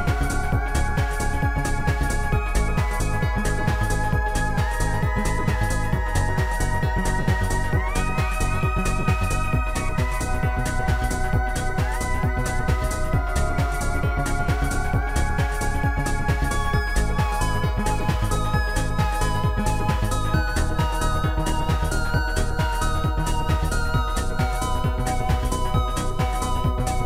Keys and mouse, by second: 0.9 click, 1.5 click, 2.6 click, 3.6 ctrl+z, 6.3 click, 8.4 ctrl+z, 8.4 click, 9.1 ctrl+z, 9.1 click, 10.2 click, 10.6 click, 12.3 click, 13.8 click, 14.1 click, 18.8 click, 21.5 ctrl+shift+z, 21.5 shift+click, 23.0 shift+click, 25.0 ctrl+z.